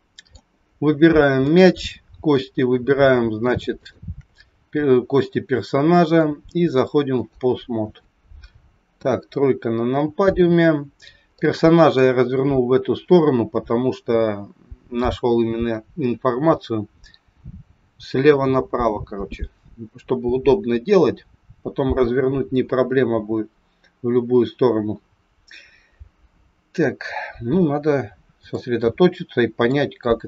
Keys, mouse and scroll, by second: 0.5-0.9 scroll up 5, 1.3 click, 3.7 shift+click, 6.0 click, 8.8 KP_3, 9.5-10.7 scroll down 6, 10.7-11.2 scroll down 2, 11.4 shift+middle click, 27.0-28.0 scroll up 2, 28.0 scroll down 1, 28.5 shift+middle click.